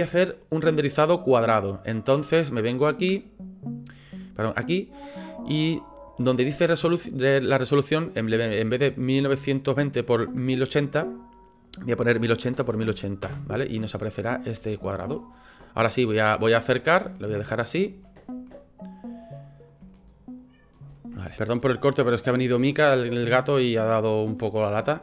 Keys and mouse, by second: 2.8 click, 4.2-13.7 drag, 14.7-16.6 ctrl+drag, 17.1 shift+click, 18.5 click, 19.9 shift+click.